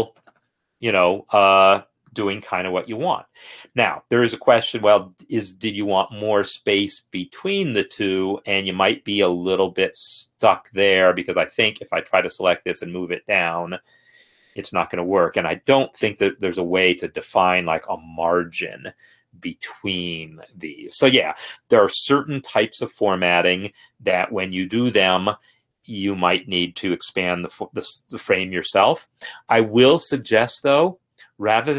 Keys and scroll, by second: 0.0-1.7 typing, 12.3 Escape, 12.8 ctrl+Down, 14.4 ctrl+Down, 14.9 ctrl+Up, 15.1 ctrl+Up, 15.6 Escape.